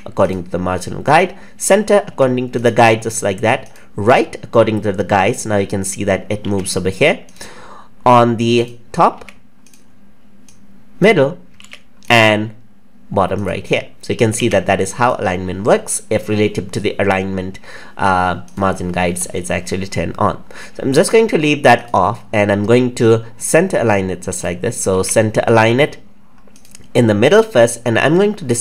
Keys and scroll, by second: 6.4 ctrl+z, 24.9 ctrl+z.